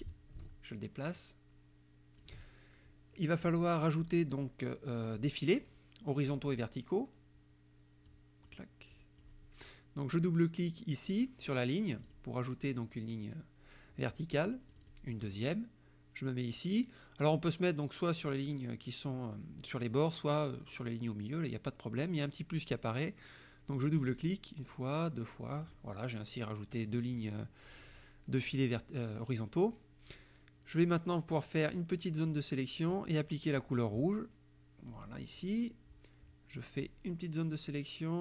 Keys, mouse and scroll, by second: 0.1-2.4 ctrl+drag, 5.1 click, 8.1 click, 9.0 click, 12.0 click, 14.8 click, 23.9 click, 25.6 click, 31.3-32.5 drag, 34.9 click, 36.8-38.2 drag.